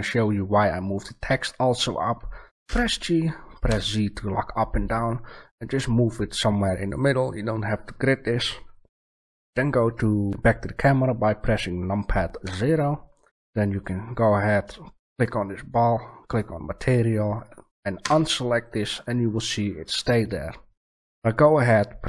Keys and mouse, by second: 2.0 middle click, 2.6 g, 6.8 click, 12.4 KP_0, 17.9 a.